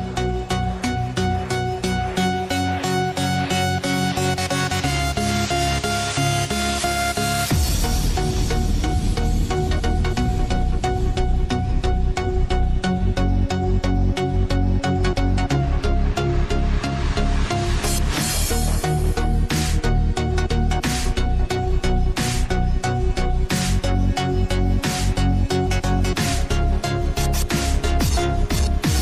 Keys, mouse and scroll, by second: 4.5 click, 5.1 click, 5.8 click, 7.5 click, 8.5-9.8 scroll up 1, 9.8 click, 10.3-11.0 scroll up 1, 11.0 click, 11.8 Tab, 12.9-15.0 drag, 15.5 click, 16.2 click, 17.6 click, 18.5 click, 19.2 click, 19.9 shift+click, 20.9 ctrl+b, 22.5 Tab, 24.0 click, 26.0 shift+click, 27.1 ctrl+b, 28.2 Tab.